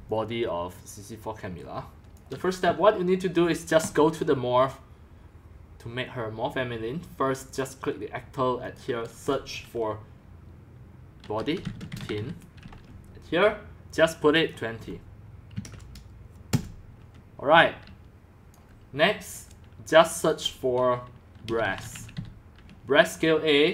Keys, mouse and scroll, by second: 0.0-2.4 typing, 4.0-11.2 drag, 11.0-12.7 typing, 11.8 click, 12.1-14.3 drag, 14.5 click, 15.3-16.0 typing, 16.5 Return, 17.5-18.9 typing, 18.7 click, 20.3-21.4 drag, 21.2-22.6 typing, 22.0 click.